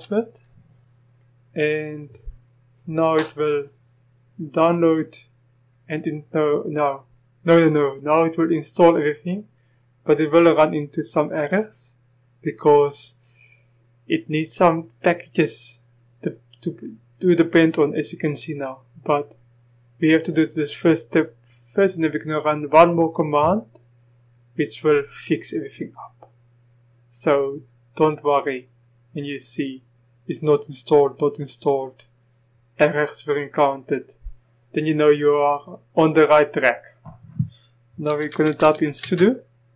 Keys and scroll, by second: 38.1-39.7 typing.